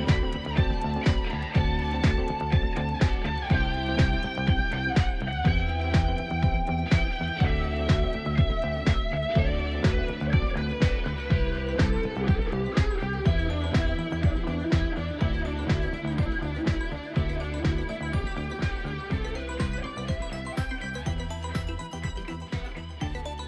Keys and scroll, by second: 12.4 ctrl+z, 15.7 ctrl+z, 21.0 ctrl+z.